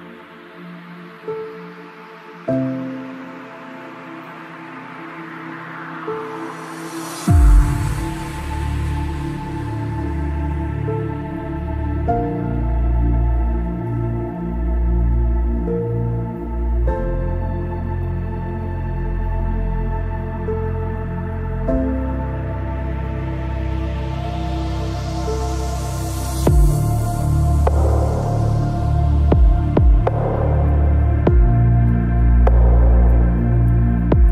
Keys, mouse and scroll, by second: 11.5 middle click, 14.3 ctrl+s, 17.8-20.0 middle drag, 18.7 x, 19.5 c, 24.7-26.5 right drag, 25.6 x, 26.9 c, 28.4-30.0 right drag, 28.9 c, 30.3-34.3 middle drag, 31.8 z, 32.5 z, 32.9 c.